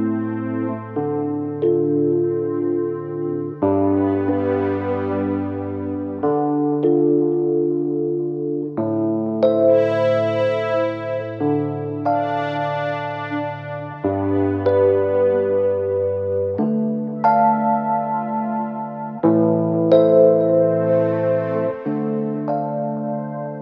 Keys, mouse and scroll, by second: 3.3 click, 5.5 space, 7.7 typing, 14.6-15.3 typing, 16.3-17.0 typing, 18.4 typing, 19.9-22.1 typing.